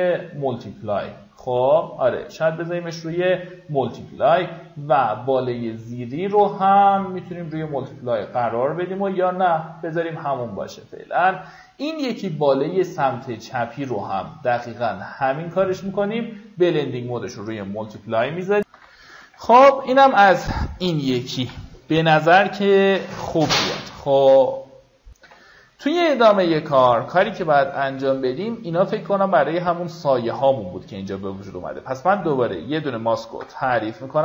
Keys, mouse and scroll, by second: 18.8 F9, 20.1-21.0 alt+scroll down 2, 21.0-23.6 alt+scroll up 2, 23.6 click, 25.6 F9, 27.0-27.7 alt+scroll up 2, 30.4 click, 33.8 b.